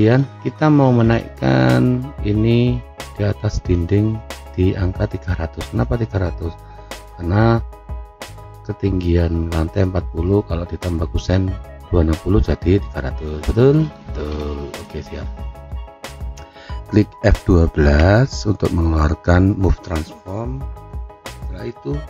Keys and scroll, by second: 17.9 F12.